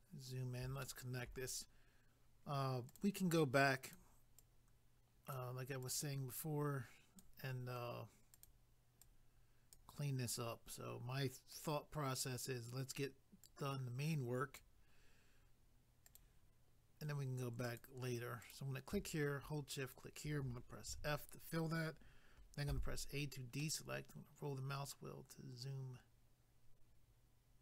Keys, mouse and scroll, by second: 2.9 click, 3.9 click, 4.4 click, 5.8 click, 6.4 click, 8.3 click, 11.5 click, 13.4 click, 16.2 click, 17.6 click, 18.4 click, 20.9 f, 23.1 scroll down 1, 23.6 middle click.